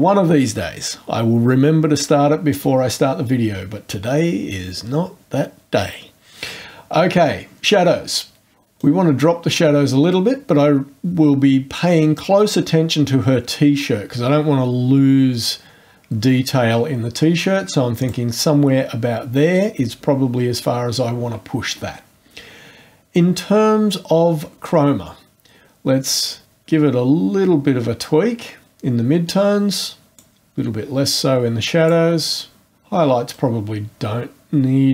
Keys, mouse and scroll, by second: 8.8-18.3 drag, 26.3-32.0 drag, 33.3-34.9 drag.